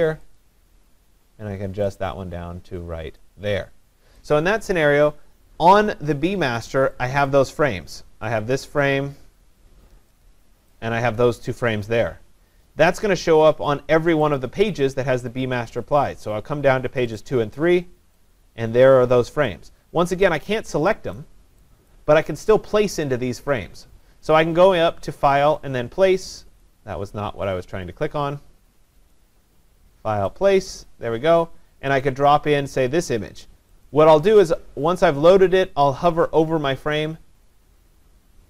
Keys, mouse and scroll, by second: 3.2 click, 7.1 click, 7.3 click, 10.4-12.1 scroll, 10.7 click, 14.4-15.8 click, 17.1 click, 17.3 click, 19.5 click, 21.2-24.5 click, 25.1 click, 26.2 click, 26.6 click, 29.1 click, 30.4 click, 37.0 click.